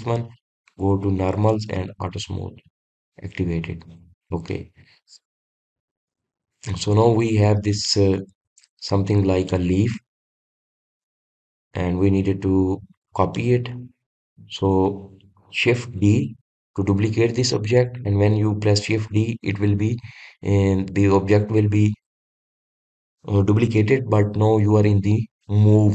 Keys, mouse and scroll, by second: 0.7 scroll down 1, 2.4 click, 3.0-4.5 middle drag, 4.5-4.9 scroll up 1, 4.9 drag, 5.4-7.0 middle drag, 7.0-7.8 scroll down 2, 7.8-12.4 middle drag, 12.4 click, 13.0-14.6 middle drag, 14.6 click, 15.5 drag, 17.3 shift+d.